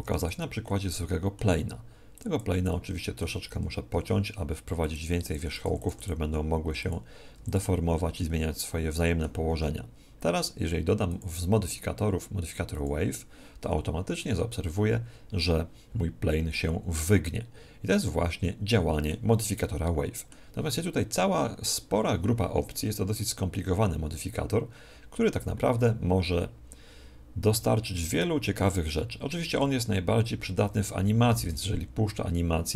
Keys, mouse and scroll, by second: 0.2-4.1 drag, 3.4 Tab, 3.9 w, 4.1 middle click, 5.3-7.3 typing, 8.2-10.0 middle drag, 9.5 Tab, 11.1 click, 14.1-16.1 middle drag, 19.5-29.7 middle drag, 31.4 alt+a.